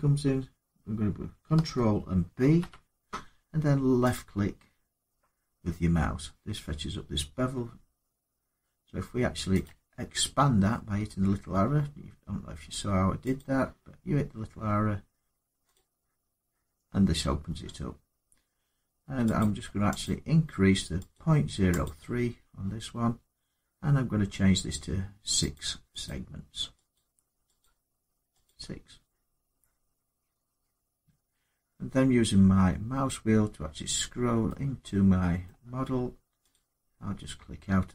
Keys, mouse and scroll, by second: 2.2 ctrl+b, 3.9 click, 9.4 click, 13.2 click, 15.5 click, 19.2 click, 21.6 click, 25.3 click, 25.8 click, 26.7 click, 27.4 click, 28.2 click, 29.5-30.5 scroll up 3, 30.9-31.3 scroll down 3, 31.3-31.6 scroll up 3, 31.9 middle click, 32.0 middle click, 32.5 middle click, 32.6 middle click, 33.1 middle click, 33.2 middle click, 35.2 middle click, 35.2-35.9 scroll, 36.3 click.